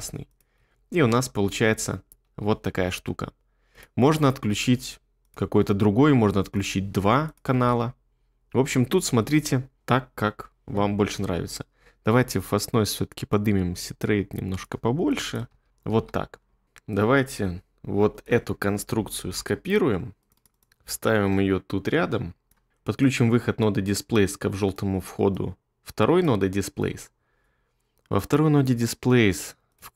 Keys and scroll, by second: 0.6 space, 2.2 space, 7.6 space, 9.8 space, 15.5 space, 15.9 space.